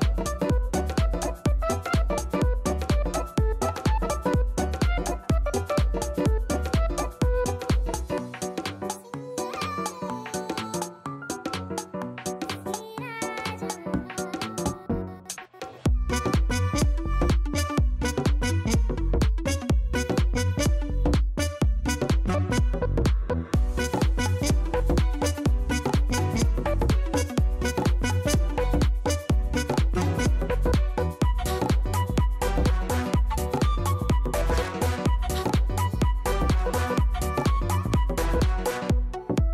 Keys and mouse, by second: 0.2 alt+right click, 0.5 click, 1.7 click, 4.5 click, 8.1 click, 9.1 click, 20.3 click, 21.7 click, 22.2 click, 22.7 click, 23.8 click, 25.8 click, 28.7 click, 32.1 click, 32.8 KP_5, 33.0 Return, 35.4 click.